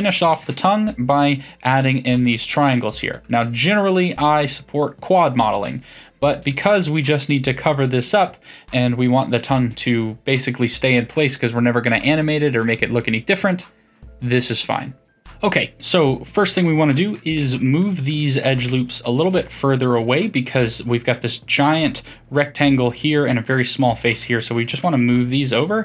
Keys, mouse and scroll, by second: 0.4 f, 0.7-2.3 middle drag, 2.3 click, 2.7 shift+drag, 3.2 shift+click, 3.6 f, 4.4-7.4 middle drag, 9.4-12.5 middle drag, 15.2 click, 16.5 shift+click, 16.9 shift+click, 17.4-18.9 middle drag, 18.9 shift+click, 19.2 shift+click, 19.5-22.5 middle drag, 23.9-24.7 middle drag, 24.7 g.